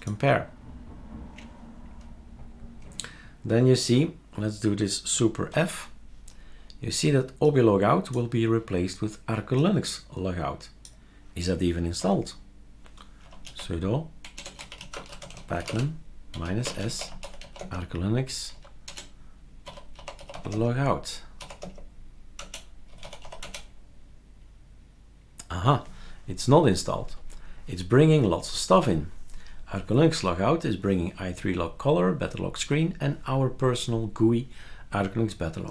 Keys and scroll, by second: 12.0 F12, 13.0-23.7 typing, 22.4 Return.